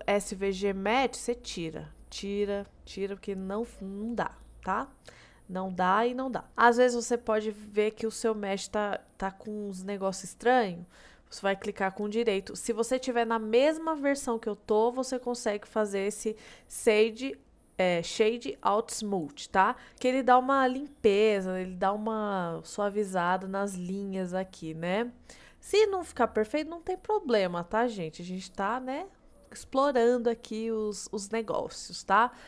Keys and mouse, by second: 1.7 click, 2.7-4.7 middle drag, 5.8-6.4 middle drag, 7.3-7.7 middle drag, 9.4 middle drag, 10.5 middle drag, 12.0-19.4 right drag, 19.8 middle click, 20.1 middle click, 21.1-21.5 middle drag, 21.9 middle click, 23.3-23.6 middle drag, 24.5-25.0 middle drag, 25.1-25.9 middle drag, 26.3-27.2 middle drag, 27.7-28.3 middle drag, 28.4-28.8 middle drag.